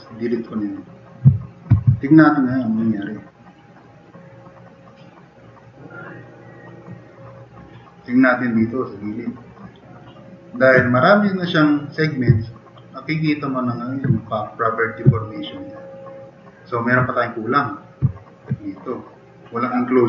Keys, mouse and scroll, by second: 1.3 drag, 1.8 alt+q, 2.3-3.0 drag, 3.3-3.8 drag, 5.6-6.3 drag, 6.4-6.8 drag, 8.8 drag, 9.5 drag, 10.0 drag, 10.5 click, 12.3-13.4 drag, 13.7 click, 15.1-15.5 drag, 15.8-16.6 drag, 18.1-18.4 drag.